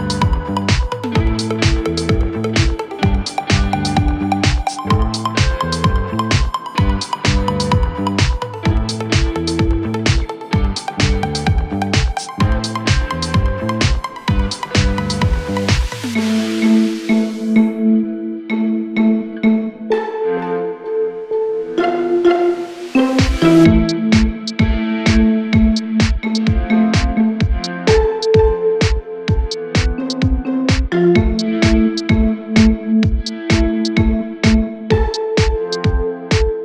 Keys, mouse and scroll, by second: 2.2 alt+scroll down 1, 2.9 alt+scroll up 1, 3.8 click, 6.6 click, 9.3-10.0 alt+drag, 12.0 alt+scroll up 1, 13.7 click, 16.2 shift+l, 17.6 shift+space, 17.8 shift+t, 19.5 shift+e, 21.2-28.3 drag, 28.3 t, 28.6 click, 29.4 ctrl+a, 30.2-31.6 typing, 32.6 click, 33.3 alt+scroll down 1, 34.5-35.3 alt+scroll up 1, 36.3 click.